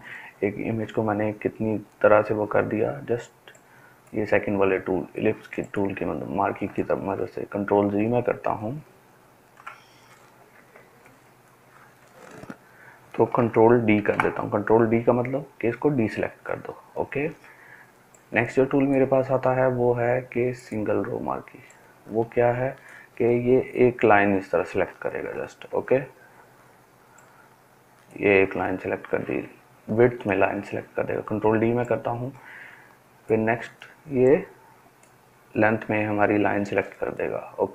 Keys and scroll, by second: 6.9 ctrl+alt+z, 7.4 ctrl+alt+z, 7.9 ctrl+alt+z, 8.3 ctrl+alt+z, 8.8 ctrl+alt+z, 9.3 ctrl+alt+z, 13.9 ctrl+d, 25.6 ctrl+z, 30.2 ctrl+z.